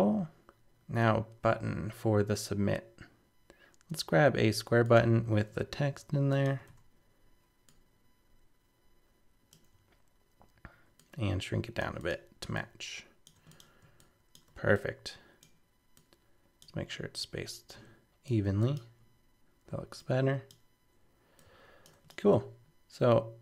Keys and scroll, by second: 5.8 super+c, 6.7 super+v.